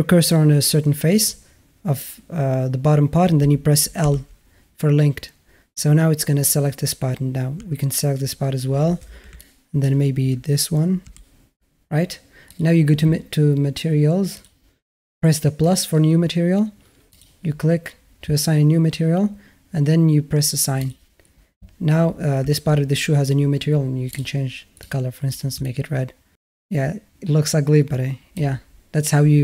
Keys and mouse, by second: 4.1 l, 7.6 l, 9.3 middle click, 11.1 l, 14.2 click, 15.5 click, 17.0-17.3 drag, 22.2 Tab, 23.9 click, 25.5-28.3 alt+middle drag.